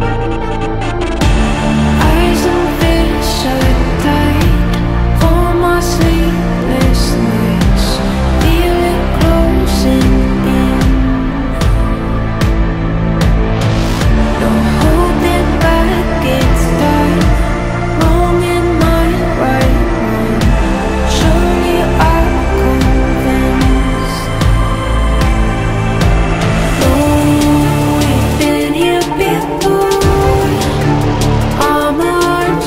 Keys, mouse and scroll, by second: 2.0 ctrl+t, 4.5 alt+scroll down 1, 4.8 alt+scroll up 1, 5.1 alt+scroll down 1, 5.2 space, 5.4 alt+scroll up 1, 5.6 space, 5.7 alt+scroll down 2, 8.9 ctrl+t, 9.5 ctrl+t, 9.7 ctrl+i, 10.3 ctrl+i, 10.6 ctrl+t, 17.6 alt+scroll up 1, 17.8 alt+scroll down 1, 18.8 alt+scroll up 1, 19.1 ctrl+t, 22.0 ctrl+t, 23.9 alt+scroll down 1, 24.2-24.6 alt+scroll up 2, 24.6 scroll down 1, 26.5-29.4 typing.